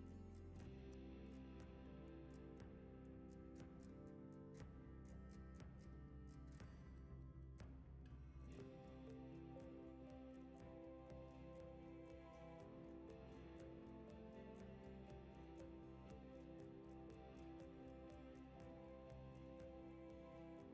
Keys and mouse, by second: 2.3 s, 3.1 g, 5.3 s, 6.3 g, 7.3 g, 8.6 shift+d, 9.8 shift+middle drag, 10.4 drag, 11.2 click, 11.4 s, 12.4 g, 13.7 shift+middle click, 14.1-20.7 typing.